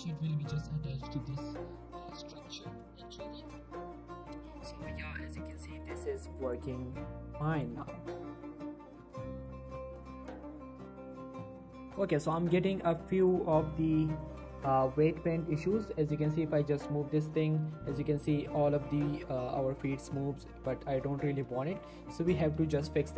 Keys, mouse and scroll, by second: 0.1 right click, 0.3-0.8 scroll up 1, 2.4 scroll down 1, 2.6 shift+middle click, 2.7 shift+scroll up 1, 3.0 g, 3.3 right click, 3.7 shift+middle click, 3.9-4.4 shift+scroll up 2, 4.4 click, 4.6 r, 5.1 right click, 5.5 click, 5.6 r, 5.8 right click, 6.5 click, 6.7 r, 7.3 right click, 7.6 click, 7.7 r, 8.8 right click, 9.1 shift+middle click, 9.4 click, 9.7 r, 10.3 click, 10.5 r, 11.1 right click, 11.5 click, 11.6 r, 11.9 right click, 12.3 click, 12.4 r, 12.6 right click, 12.8 shift+middle click, 13.2 click, 13.4 r, 14.1 right click, 14.7 click, 14.9 r, 15.5 right click, 15.9 scroll down 1, 16.2 shift+middle click, 16.9 r, 17.2 right click, 17.4 shift+middle click, 18.1 right click, 18.9 r, 21.3-21.6 scroll down 1, 21.6 Tab.